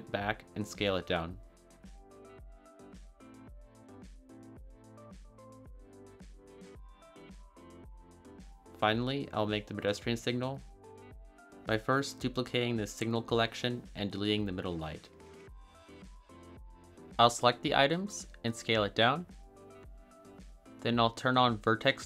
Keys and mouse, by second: 1.4 click, 1.8 s, 4.0 click, 5.1-5.8 drag, 6.1 a, 6.2 a, 10.2 click, 10.5-11.3 drag, 14.4 click, 14.7 x, 16.0 click, 17.1 s, 18.7 click, 20.0-21.0 middle drag, 21.7-22.0 drag.